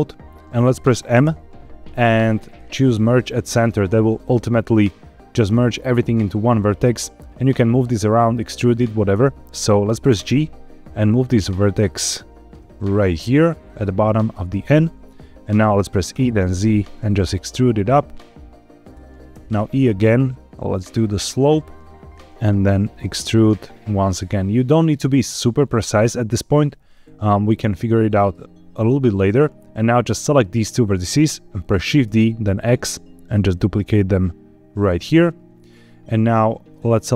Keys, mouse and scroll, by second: 1.1 m, 10.0 g, 13.9 click, 14.2 shift+middle click, 16.0 e, 16.3 z, 18.7 click, 19.2 e, 22.1 click, 22.2 z, 26.4 click, 26.8 shift+middle click, 29.6 click, 32.0 shift+d, 32.4 x, 34.8 click, 36.6 click.